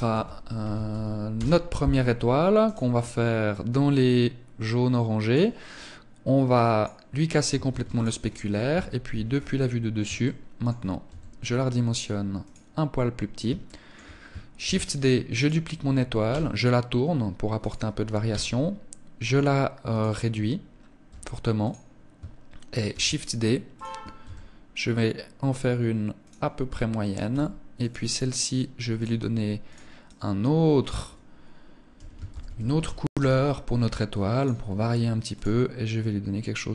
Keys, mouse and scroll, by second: 2.0 click, 5.9 click, 7.1 ctrl+s, 8.1 KP_7, 8.7-9.2 scroll down 5, 9.6 shift+middle click, 10.5 s, 11.9 click, 12.4 scroll up 4, 13.0 shift+middle click, 14.0 shift+d, 14.8 click, 15.7 r, 17.3 click, 17.7 s, 20.5 g, 21.1 click, 22.3 shift+d, 23.2 click, 23.6 s, 25.7 click, 26.7 g, 27.3 click, 28.4 click, 33.7 click, 34.6 click.